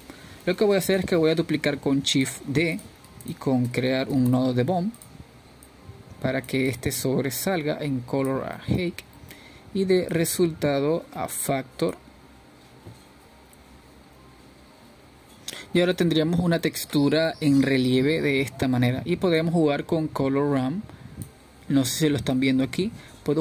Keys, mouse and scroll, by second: 0.8-2.1 drag, 2.1 shift+d, 6.0-7.6 drag, 7.6 shift+a, 10.0-11.8 drag, 12.1-13.4 middle drag, 13.4 click, 19.0-19.5 middle drag, 19.5-19.9 scroll up 3, 19.9-20.9 middle drag, 20.9-22.8 scroll down 2, 22.8-23.4 drag.